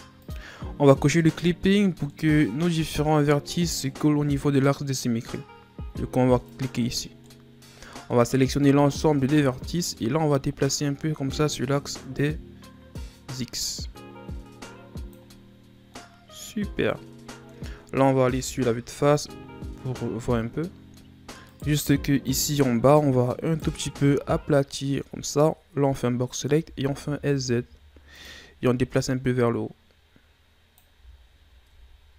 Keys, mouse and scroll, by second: 2.1-5.1 middle drag, 6.5 click, 7.3-8.4 middle drag, 8.4 a, 8.7 a, 9.4-10.7 middle drag, 10.7 click, 15.5-15.9 scroll down 1, 15.9-18.3 middle drag, 18.3 KP_1, 21.5 right click, 21.9 z, 22.4-23.5 scroll up 3, 23.5 right click, 23.9 b, 26.6 s, 29.0-30.9 drag, 30.9 z, 31.4-31.7 scroll down 3, 31.7 Tab.